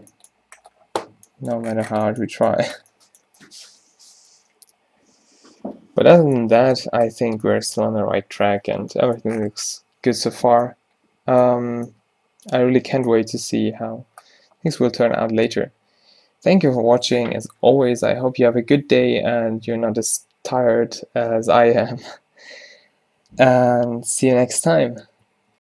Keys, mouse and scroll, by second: 1.2 a, 6.2-7.5 middle drag.